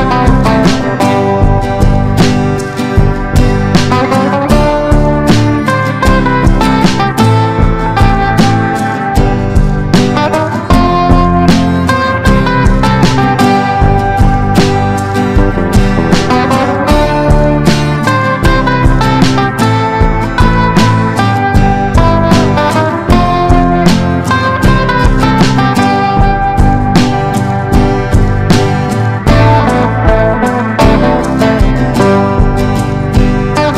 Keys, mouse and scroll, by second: 0.8 Left, 1.0 Left, 2.5 click, 3.5 shift+click, 4.4 click, 12.0 F4, 12.6 click, 12.8 F4, 13.3 click, 13.5 F4, 14.0 click, 16.9 F4, 17.2 click, 17.5 F4, 18.1 click, 18.3 F4, 19.1 click, 19.2 F4, 19.6-33.7 drag.